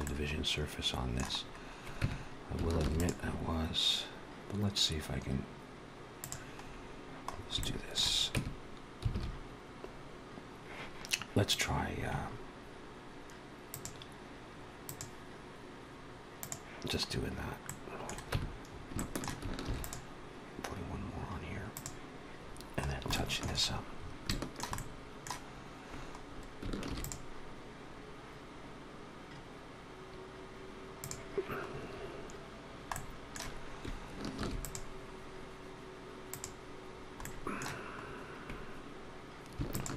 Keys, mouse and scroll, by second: 1.3-1.8 scroll up 1, 1.8 Tab, 1.8-2.4 scroll up 1, 2.8 ctrl+r, 6.5-7.1 scroll down 2, 7.1-7.9 scroll down 4, 7.4 shift+middle click, 8.2 Tab, 9.0 alt+a, 11.3 click, 13.5 click, 14.7 click, 16.9-17.5 scroll up 1, 17.5 middle click, 18.1 Tab, 18.5 scroll up 2, 18.8 shift+middle click, 19.5 ctrl+r, 22.3-22.9 scroll down 3, 23.0 shift+middle click, 23.5-24.2 scroll up 5, 24.1 shift+middle click, 24.6 middle click, 25.2-25.8 scroll up 2, 26.0-26.5 scroll down 2, 26.7 ctrl+r, 31.6-32.5 scroll up 1, 32.5 scroll down 1, 32.8 middle click, 34.2 ctrl+r, 36.8 scroll down 2, 37.1 middle click, 37.9 scroll up 2, 39.5 alt+shift+click.